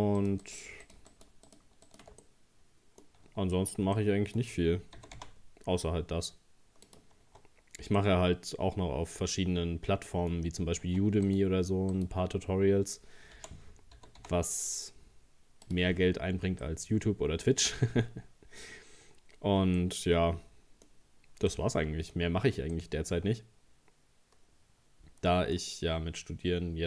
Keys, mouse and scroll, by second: 0.2 shift+right click, 0.4 shift+right click, 0.8 shift+right click, 1.1 shift+right click, 1.5 shift+right click, 1.9 shift+right click, 2.2-5.0 middle drag, 5.0 g, 7.2 Tab, 7.5-7.9 scroll down 2, 8.0-10.6 middle drag, 10.6 scroll up 2, 10.9 Tab, 11.3 right click, 11.9 right click, 13.4 o, 14.0 g, 16.1-16.6 scroll down 1, 16.6-19.4 middle drag, 19.4-19.8 scroll down 2, 19.8-21.0 middle drag, 21.0-21.5 scroll up 2, 21.5 middle click, 22.2-22.7 scroll up 1, 22.7-25.6 middle drag, 25.6-26.2 scroll up 1, 26.2-26.8 scroll up 1.